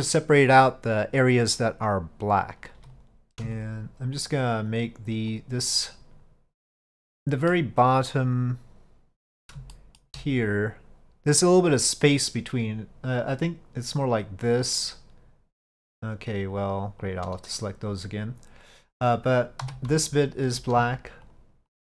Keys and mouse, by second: 3.6 shift+click, 4.2 shift+click, 4.7 shift+click, 5.4 shift+click, 5.8-7.0 shift+drag, 7.0 middle click, 9.8 shift+middle click, 13.3 click, 14.2-16.1 drag, 20.1 alt+click, 21.4 shift+click, 21.8 shift+click.